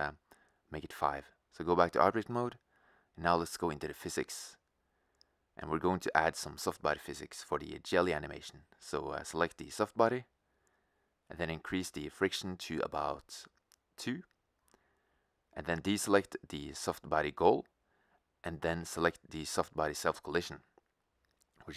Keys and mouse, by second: 0.9-2.4 drag, 5.7 click, 9.8-11.7 drag, 12.0-13.8 drag.